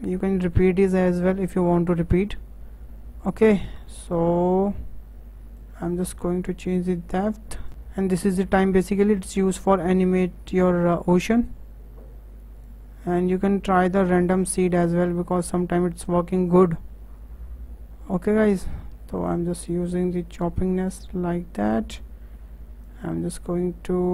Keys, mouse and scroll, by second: 0.4-4.4 drag, 5.5-7.7 drag, 8.2-11.2 drag, 12.6-14.3 drag, 16.5-22.3 drag, 22.8-24.1 drag.